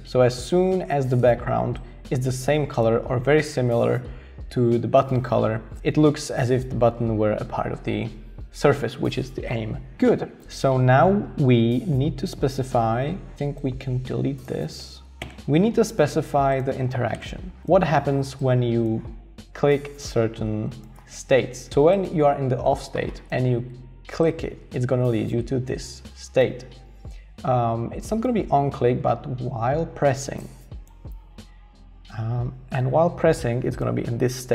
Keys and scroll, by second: 15.2 BackSpace, 17.2 BackSpace.